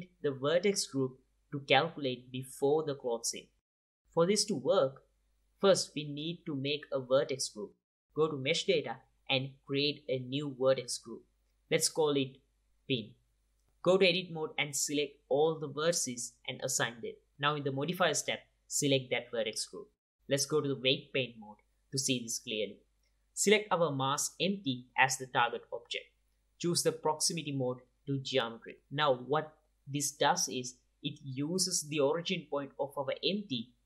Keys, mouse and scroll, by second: 4.2-11.2 drag, 13.0 Tab, 15.9-18.4 drag, 17.9 alt+a, 18.3 Tab, 19.3-21.8 drag, 21.4 ctrl+Tab, 25.5-26.8 drag, 27.7 click, 28.0 click, 28.6-30.5 drag.